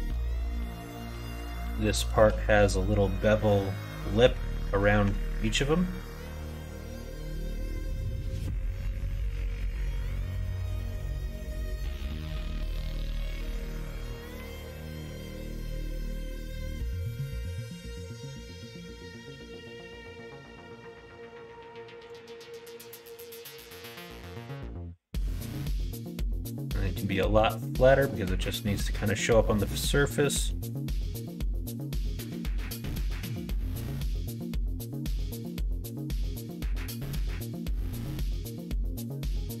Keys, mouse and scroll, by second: 0.0 KP_3, 0.3 KP_9, 1.7 shift+middle click, 3.0 middle click, 4.9 Tab, 7.2 Tab, 8.5 middle click, 9.5 shift+middle click, 10.0 middle click, 13.5 click, 14.2 l, 14.7 l, 15.3 l, 15.9 middle click, 16.1 click, 16.4 click, 17.5 g, 22.3 middle click, 24.0 s, 26.8 middle click, 27.6 shift+middle click, 28.3 scroll up 1, 28.4-29.7 middle drag, 30.2 scroll up 1, 30.3 middle click, 30.5 scroll down 1, 31.1 middle click, 32.4 g, 35.7 middle click, 37.0 middle click, 38.1 shift+d.